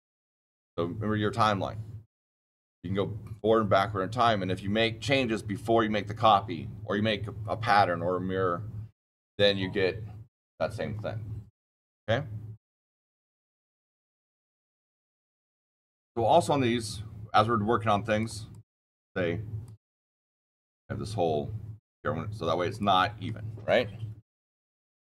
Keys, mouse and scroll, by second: 14.4 click, 18.1 click, 18.5 click, 19.6 click, 20.6 click, 22.6 click, 24.4 middle click.